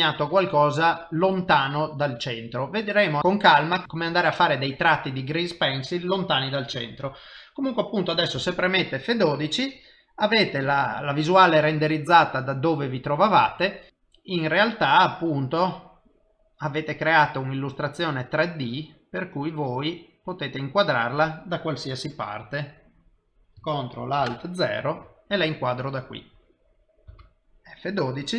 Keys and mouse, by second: 22.1 middle click, 24.6 ctrl+alt+KP_0, 27.5 F12.